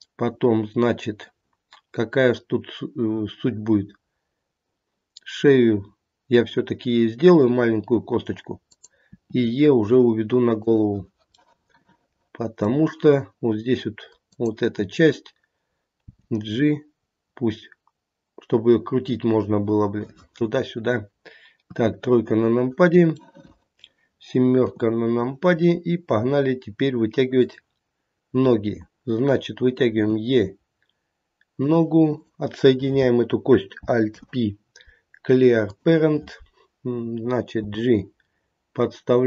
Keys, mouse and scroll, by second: 9.0 e, 11.4 middle click, 12.3 middle click, 14.2 click, 16.0 g, 21.6 KP_3, 23.2 middle click, 23.7 middle click, 24.6 KP_7, 25.6 scroll down 3, 26.2 scroll up 2, 27.3 click, 29.9 e, 32.2 click, 34.1 alt+p, 37.5 g.